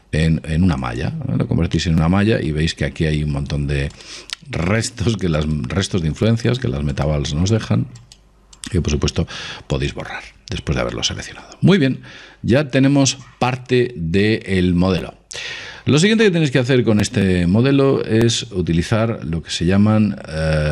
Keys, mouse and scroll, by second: 1.9-5.4 middle drag, 4.0-10.4 right drag, 9.5 x, 10.6-13.0 middle drag.